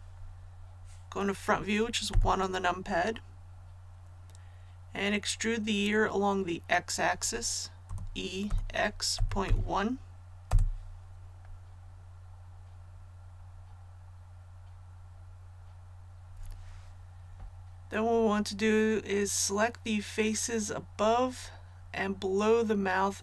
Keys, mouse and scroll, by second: 2.0 KP_1, 7.8-9.4 typing, 10.4 Return.